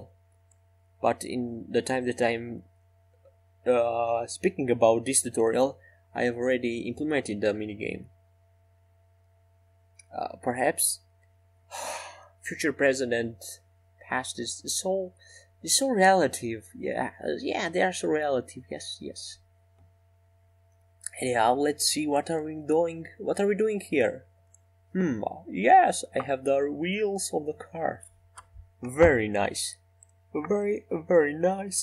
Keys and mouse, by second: 2.6 r, 4.6 r, 8.5 s, 10.9 s, 18.2 shift+d, 25.6 KP_3, 27.1 KP_7, 28.2 KP_1, 30.7 KP_5.